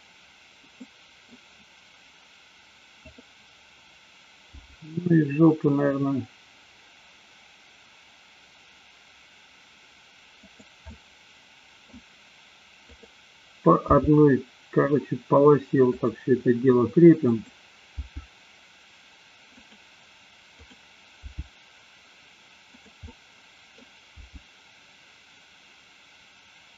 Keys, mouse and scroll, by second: 0.0 middle click, 0.7 scroll up 2, 1.0 middle click, 1.4 scroll down 2, 3.0-3.7 drag, 4.5 g, 10.9 scroll up 2, 11.0-12.0 middle drag, 12.9 click, 14.0 g, 17.2 click, 18.1 g, 19.7 click, 20.6 click, 21.5 g, 23.1 middle click, 23.1 scroll up 1, 24.2 g.